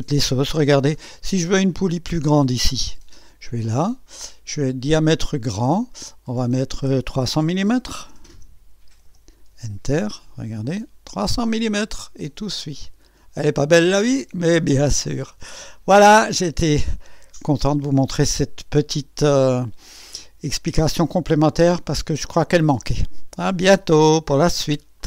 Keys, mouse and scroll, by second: 1.0-1.8 drag, 3.5 click, 5.5 click, 6.3 click, 7.6 KP_3, 8.0 KP_0, 8.9 m, 9.5 Return, 10.1 typing, 10.6 click, 11.5-14.8 drag, 15.0 scroll up 1, 15.7 scroll down 1, 15.9 scroll up 1, 16.2-16.9 right drag, 18.8-21.7 drag, 21.8 scroll up 1, 22.5 scroll down 1, 23.7-24.4 typing, 23.9 right click, 25.0 click.